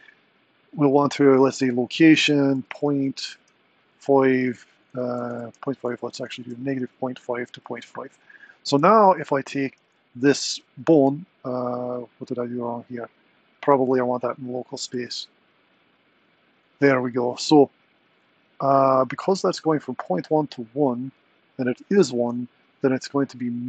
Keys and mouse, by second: 2.0-7.7 drag, 5.2 BackSpace, 9.0 click, 9.8 r.